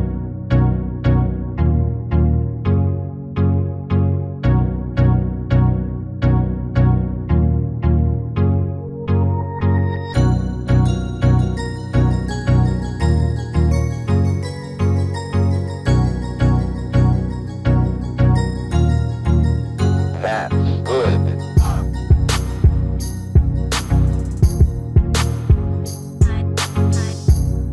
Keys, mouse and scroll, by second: 0.3 s, 12.6-17.7 middle drag, 17.7-19.2 right drag, 19.2 middle click, 20.6-26.8 right drag, 26.4-27.7 middle drag.